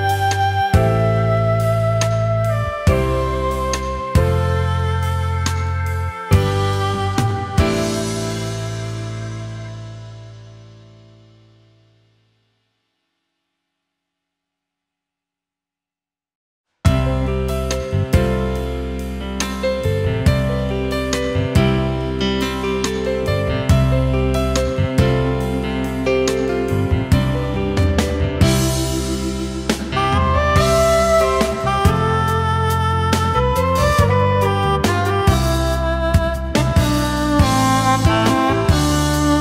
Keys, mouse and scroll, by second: 2.6 shift+click, 5.5 alt+scroll down 1, 5.7 space, 6.8 alt+scroll up 1, 8.1-8.4 alt+scroll down 1, 8.4 space, 10.4 ctrl+s, 13.6 Return, 18.4 alt+scroll down 1, 18.6 space, 19.6 alt+scroll up 1, 19.9 space, 21.3 alt+scroll up 1, 24.8 space, 27.1-29.3 alt+scroll up 1, 30.3 alt+click, 34.5 space, 35.2 alt+scroll up 1.